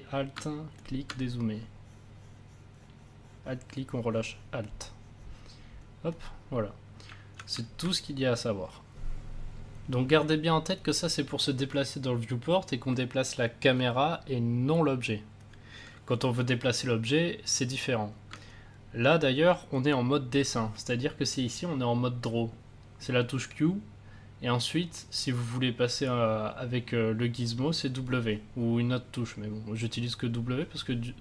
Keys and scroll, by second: 7.5 a.